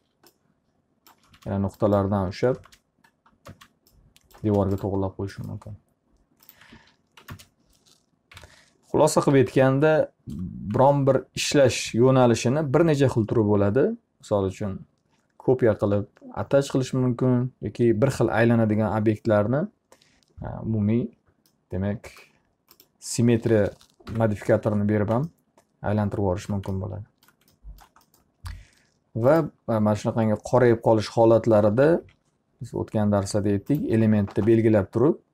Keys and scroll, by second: 0.5 alt+a, 1.8 space, 7.3 alt+a, 7.8 ctrl+space, 8.9 p, 9.8 z, 24.2 Delete, 32.0 F3, 34.8 ctrl+a.